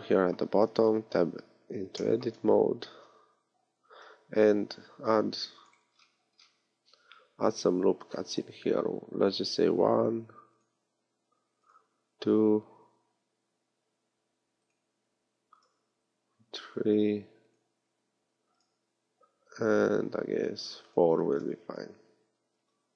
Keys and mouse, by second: 0.9 Tab, 3.9 ctrl+r, 7.0 ctrl+r, 10.8 ctrl+r, 15.1 ctrl+r, 16.5-17.5 middle drag, 17.9 ctrl+r.